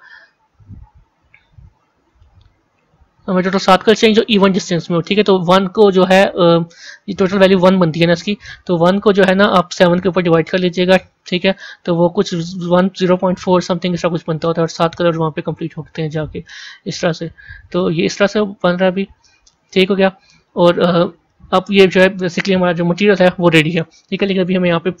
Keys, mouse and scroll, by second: 16.7-19.0 drag, 19.0-25.0 drag.